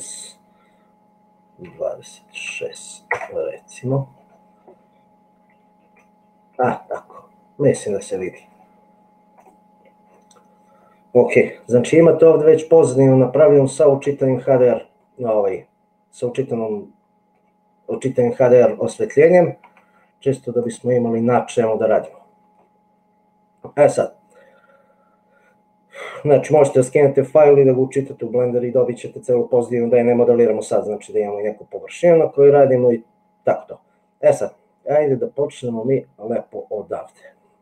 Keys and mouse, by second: 5.9 a, 12.0 n, 13.2-14.3 middle drag, 15.4-17.3 middle drag, 20.6 click, 22.0 middle click, 32.8-37.1 middle drag.